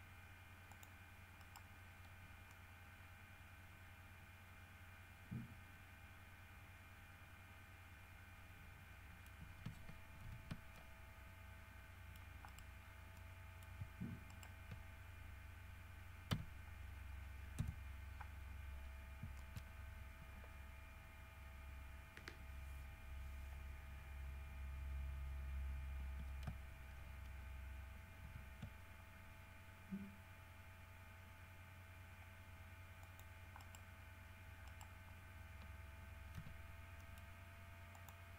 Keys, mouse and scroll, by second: 0.9 click, 1.6 right click, 2.4 scroll down 1, 2.7-6.9 middle drag, 9.2 middle click, 10.5 alt+h, 10.9-12.6 alt+middle drag, 12.7 right click, 13.0 scroll down 1, 13.3 scroll up 1, 13.4 middle click, 14.5 shift+middle click, 16.5 f, 17.8 KP_3, 19.6 shift+middle click, 19.9 shift+scroll up 2, 28.4 ctrl+r, 29.2-29.8 ctrl+scroll up 5, 31.5 scroll up 1, 33.2 click, 33.8 right click, 34.9 right click, 36.6 g, 37.2 middle click, 38.2 click.